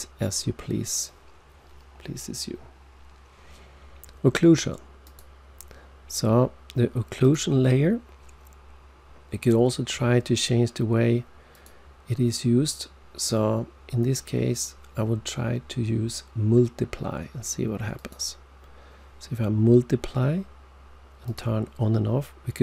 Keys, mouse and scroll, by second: 5.0 click, 7.1 click, 11.5 click, 17.9 click, 21.2 click.